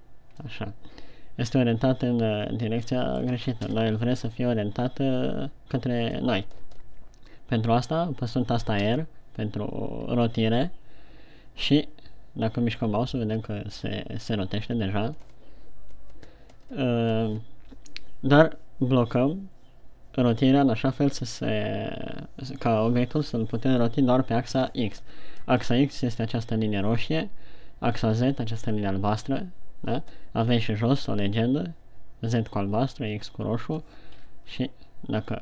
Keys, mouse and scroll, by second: 0.1 shift+c, 0.9 middle click, 4.1 KP_1, 9.3 r.